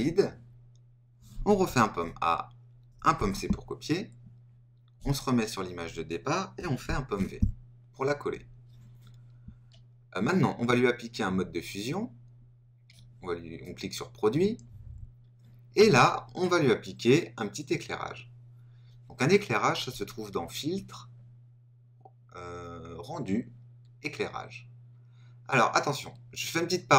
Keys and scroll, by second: 1.8 super+a, 3.1 super+c, 6.8 super+v.